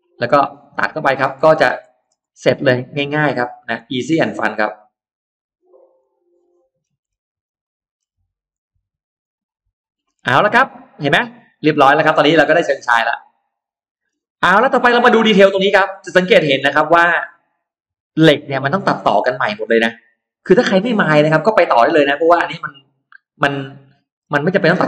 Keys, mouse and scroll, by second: 0.0-1.3 scroll down 3, 0.3 middle click, 0.8 middle click, 1.4-2.1 scroll up 4, 2.2 middle click, 2.5-2.8 scroll down 2, 3.0 click, 3.6 click, 5.0 click, 5.8 click, 6.2 middle click, 6.5-6.8 scroll down 2, 6.8-7.6 scroll up 4, 7.4 middle click, 7.8-8.1 scroll down 2, 8.4 click, 9.0 click, 9.9-10.6 scroll down 4, 10.8-13.8 middle drag, 10.9-11.2 scroll down 2, 14.1-15.3 scroll up 3, 15.4 middle click, 16.6-17.2 scroll up 2, 17.5-21.0 middle drag, 21.1-21.4 scroll down 1, 22.6-23.0 scroll up 1, 22.6-23.9 middle drag, 24.0 scroll down 2, 24.7-24.8 scroll up 2.